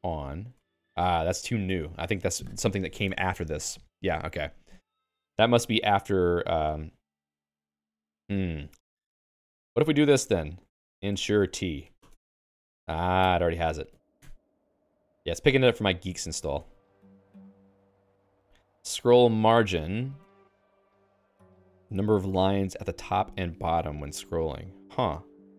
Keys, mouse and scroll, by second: 0.0-0.5 typing, 12.0 ctrl+alt+x, 14.0 ctrl+s, 16.2 d, 16.6 ctrl+s, 17.6-18.6 j.